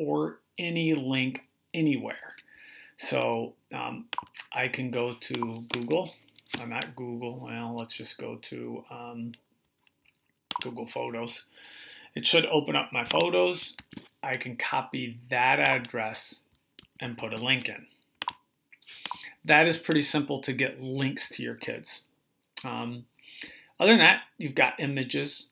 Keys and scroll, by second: 13.6 super+c, 17.0 super+v.